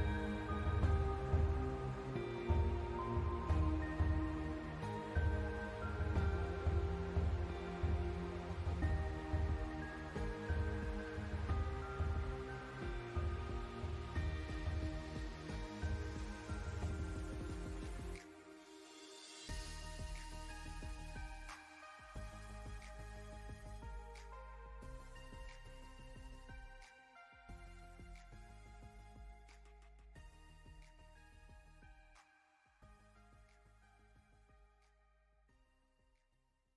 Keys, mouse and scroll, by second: 0.9 alt+scroll down 1, 1.4 scroll up 1, 1.7 scroll down 1, 2.0 alt+scroll up 1, 3.5-8.5 drag, 9.0 alt+scroll down 1, 9.8 click, 11.2 alt+scroll up 1, 18.7 space, 18.8 click, 19.0 space, 19.8-21.3 drag, 21.3 scroll up 1, 21.6 space, 21.8 click, 22.0 space, 22.7-24.5 drag, 24.8 alt+scroll down 1, 25.3 space, 25.6 space, 25.9 click, 30.0 click, 31.1 alt+scroll up 1, 31.8 click, 32.0 scroll up 1, 32.8-36.7 drag.